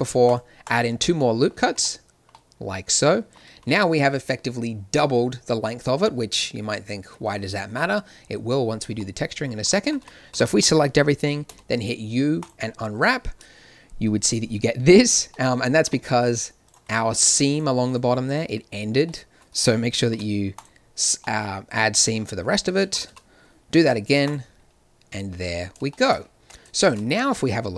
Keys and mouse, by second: 1.1 click, 1.6 a, 2.1-3.5 drag, 3.5 z, 9.4-11.4 drag, 9.8 a, 10.0 a, 10.3 a, 11.4 u, 16.6-20.0 middle drag, 20.0 ctrl+e, 22.9 a, 23.0 a, 23.8 u, 26.4 Tab, 27.4 shift+z.